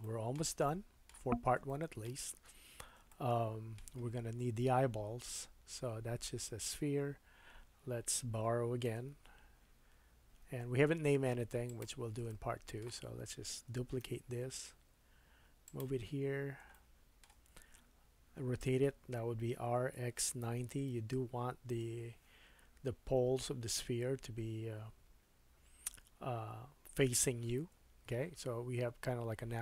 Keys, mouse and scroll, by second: 0.0 shift+middle click, 0.8 shift+middle click, 2.5-3.0 scroll up 2, 3.1 shift+middle click, 5.6-11.8 drag, 6.0 Tab, 8.9 KP_1, 10.4 Tab, 11.8-12.9 middle drag, 14.0 shift+d, 16.0-16.6 scroll up 5, 16.7-29.6 shift+middle drag, 19.4 r.